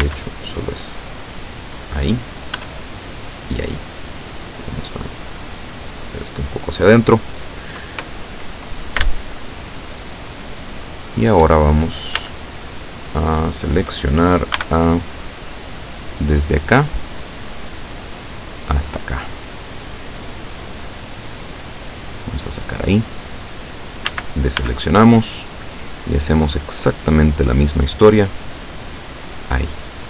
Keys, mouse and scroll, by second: 0.0 b, 1.1 click, 2.6 b, 3.0 click, 4.4-6.8 drag, 9.2-11.6 shift+middle drag, 12.2 a, 14.6 b, 16.7-19.1 drag, 20.1-22.8 drag, 24.1 a, 24.7 b, 25.7-27.4 drag, 28.3-29.7 drag, 29.9-30.0 middle drag.